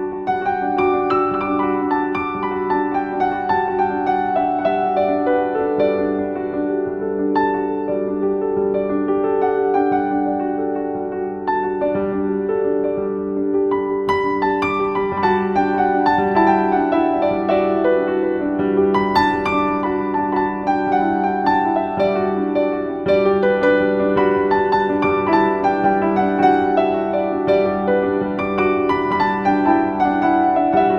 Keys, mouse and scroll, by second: 0.0 ctrl+x, 1.8 click, 2.7 ctrl+v, 3.7 click, 3.9 z, 4.1 click, 4.4 space, 4.6 z, 5.3 click, 15.3 click, 20.0 click, 22.4 click, 26.7 click.